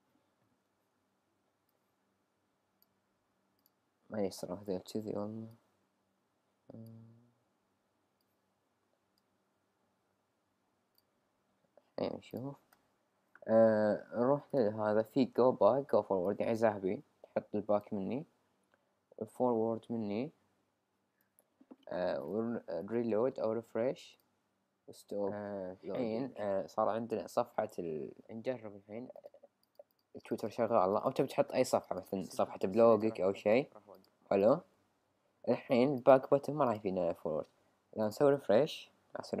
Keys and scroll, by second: 0.7 super+z.